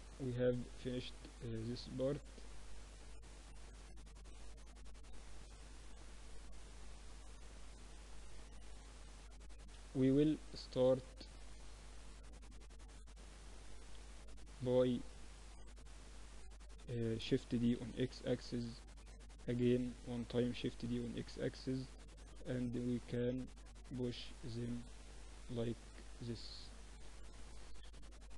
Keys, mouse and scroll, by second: 0.8 Tab, 2.2 Tab, 3.0 Tab, 3.9 t, 4.5-6.4 drag, 4.8 t, 8.3 KP_1, 8.8 click, 8.8 KP_3, 9.7 z, 11.3 click, 11.3 s, 12.3 middle click, 12.5 r, 13.5 z, 14.1 click, 15.4 KP_7, 17.5 shift+d, 20.4-25.9 drag, 20.4 shift+d, 23.1-24.3 right drag, 25.1 KP_1, 26.3-28.1 drag, 28.1 middle click.